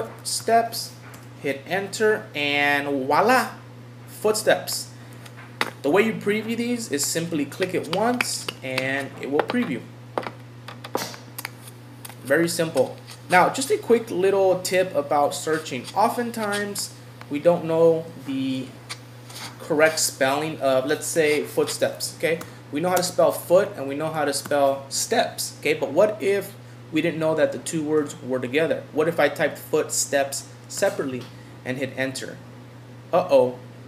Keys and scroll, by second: 1.2 Return, 30.8 Return.